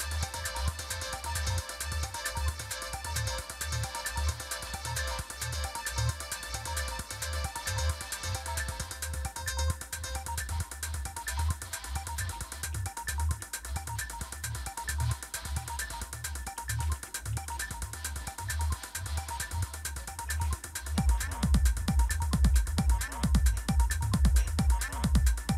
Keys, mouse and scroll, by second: 1.1 click, 5.2 click, 13.1 shift+super+=, 16.0 Up, 16.3 Up, 16.8 Down, 17.0 Down, 17.3 Up, 17.5 Up, 18.8 click, 19.8 click, 19.8 super+Right, 21.2 shift+super+=.